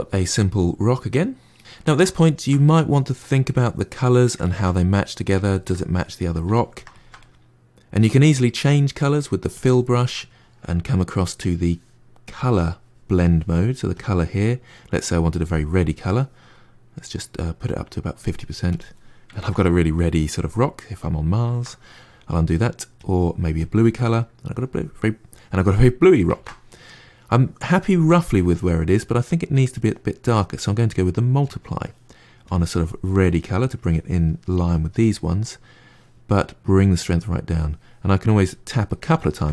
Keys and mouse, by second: 9.4-16.9 drag, 17.4-18.9 drag, 19.2-21.4 ctrl+middle drag, 21.4 ctrl+z, 22.9 click, 23.5 click, 23.9-26.2 middle drag, 26.2 ctrl+z, 30.1-33.7 drag, 36.4-38.3 drag, 39.1-39.5 ctrl+middle drag.